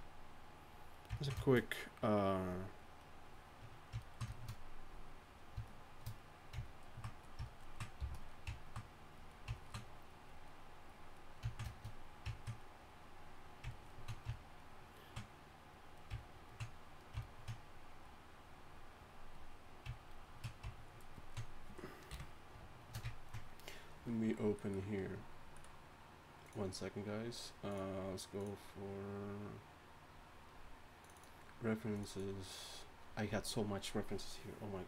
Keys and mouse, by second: 0.2 click, 4.5-15.1 drag, 8.0 f, 16.0-17.3 drag, 19.9 click, 20.5-20.9 drag, 22.1 KP_1.